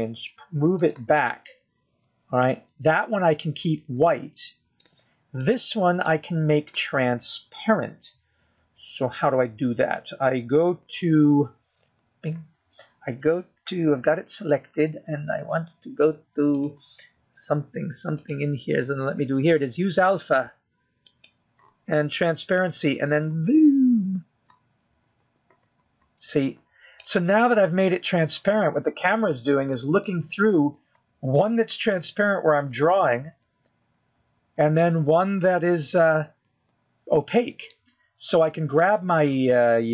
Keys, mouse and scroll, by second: 1.0 g, 3.6 middle click, 7.8 click, 8.5 middle click, 14.2 KP_0, 18.9 click, 20.6 click, 23.5 click, 25.0 click, 31.5 middle click, 32.7 middle click.